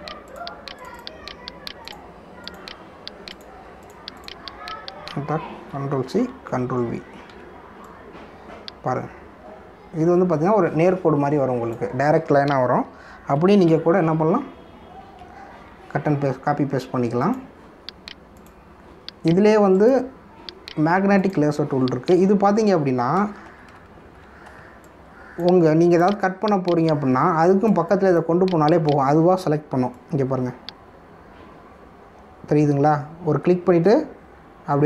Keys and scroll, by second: 6.7 ctrl+c, 7.2 ctrl+v, 8.3 v, 15.1 ctrl+alt+z, 24.4 ctrl+=, 25.5 space.